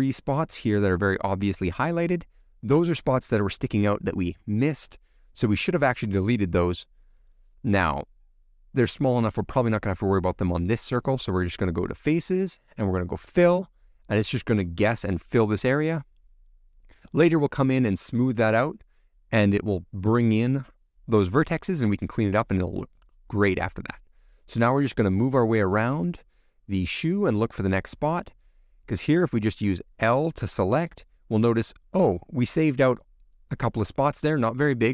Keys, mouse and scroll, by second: 14.0-15.0 drag, 15.0-15.7 scroll down 1, 15.7 scroll down 1, 15.8-17.1 middle drag, 17.1-18.2 scroll down 1, 19.9 alt+h, 20.5-21.0 scroll down 4, 21.8-25.4 middle drag, 26.1 click, 26.3 scroll up 1, 26.5-27.9 middle drag, 27.9 click, 29.5 scroll up 1, 29.6 middle click, 30.1-30.8 scroll up 2, 30.8 l, 31.3-31.8 scroll down 1, 31.8 scroll up 1, 31.9-34.6 middle drag.